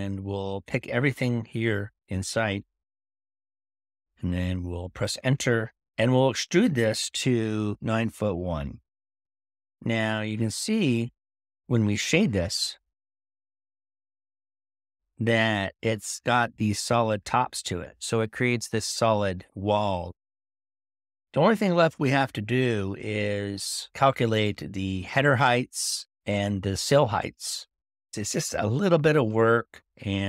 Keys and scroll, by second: 13.5 typing.